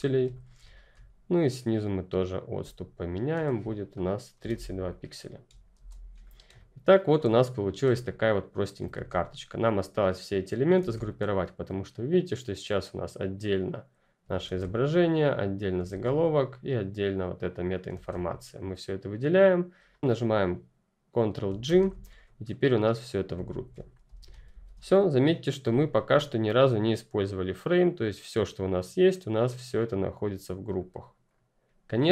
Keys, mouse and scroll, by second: 0.1 space, 0.2 click, 3.8 click, 4.2 Down, 4.8 click, 5.7 ctrl+0, 6.1 click, 6.4 space, 6.5 click, 6.9 space, 8.1 click, 8.8 ctrl+z, 10.1 click, 10.7 ctrl+z, 11.0 click, 14.4 ctrl+z, 15.1 click, 15.8 ctrl+z, 16.5 click, 17.9 ctrl+z, 18.1 click, 19.9 z, 21.4 z, 21.6 ctrl+g, 22.0 click, 23.4 ctrl+z, 24.1 alt+h, 24.4 alt+v, 24.7 alt+click.